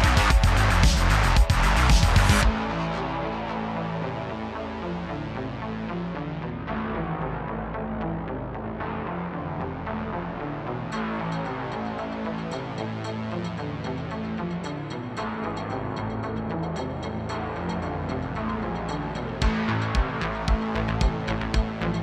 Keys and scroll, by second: 0.9 space, 2.2 shift+f, 4.3 space, 4.4 space, 4.8 shift+f, 6.4 d, 9.4 space, 10.0 super+z, 10.3 shift+d, 15.3-16.7 typing.